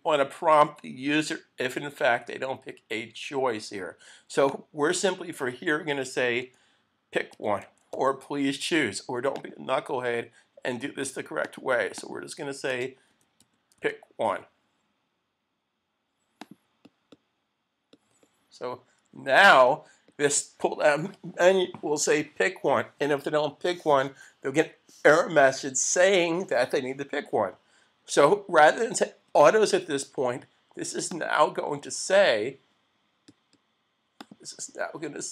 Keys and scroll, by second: 19.4 super+s.